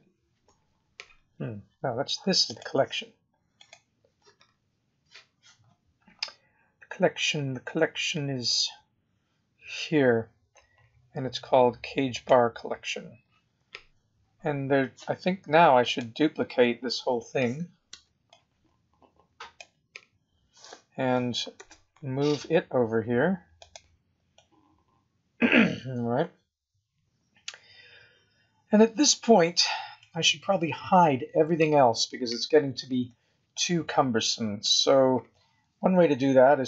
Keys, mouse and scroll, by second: 2.4 click, 3.5 click, 5.6 scroll down 3, 6.1-6.7 scroll down 8, 7.1-8.1 scroll up 17, 8.4-10.3 scroll up 19, 12.1 click, 15.8 click, 17.8 b, 21.6 shift+d, 24.3 middle click, 30.3-30.7 scroll down 3, 32.8 scroll down 1, 33.1 middle click.